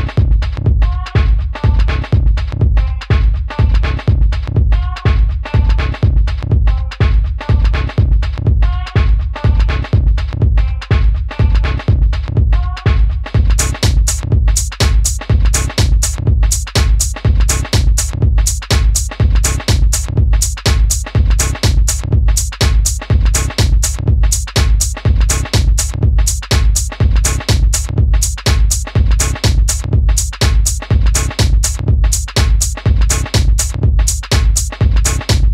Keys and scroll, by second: 5.7 BackSpace, 15.6 super+c, 19.9 super+c, 20.0 super+v, 23.9 Right, 24.0 Right.